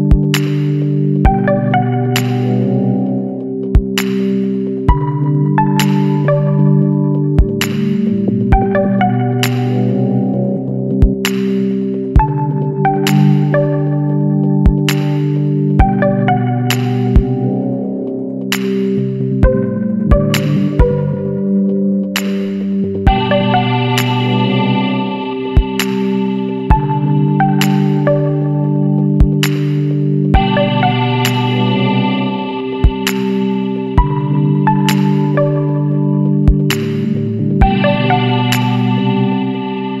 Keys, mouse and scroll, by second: 4.6-5.3 middle drag, 5.3-5.7 scroll down 2, 5.7 alt+a, 5.9-7.2 middle drag, 7.2 click, 8.8-11.8 drag, 15.6-16.0 scroll up 1, 16.0-20.1 shift+middle drag, 20.1-22.6 drag, 22.9-25.9 shift+drag, 28.4-30.0 drag, 30.0 KP_9, 31.9-34.9 drag, 34.9 scroll down 2, 35.1-35.4 middle drag, 35.4 a, 35.9-36.2 middle drag, 36.2 alt+a, 36.5-37.6 middle drag, 37.6 click, 38.1 Tab, 38.6 a, 39.0-40.0 shift+middle drag.